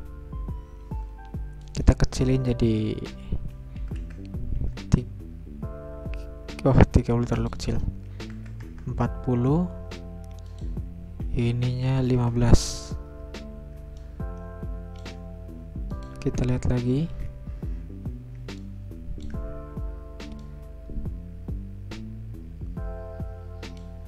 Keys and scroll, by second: 3.6-4.4 typing, 6.9 Return, 7.9-8.8 typing, 11.3 Return, 11.5-12.3 typing, 13.7 Return, 16.7 alt+0, 18.1 Return.